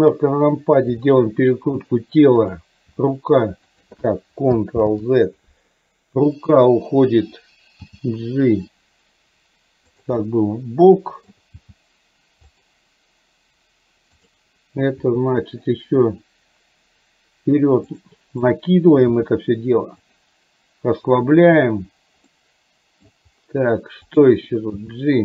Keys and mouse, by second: 1.0 r, 3.0 g, 4.9 ctrl+z, 6.7 click, 8.0 g, 10.2-11.4 middle drag, 11.6 g, 14.4 click, 15.0 r, 19.3 g, 22.4 middle click, 24.1 click, 24.7 g.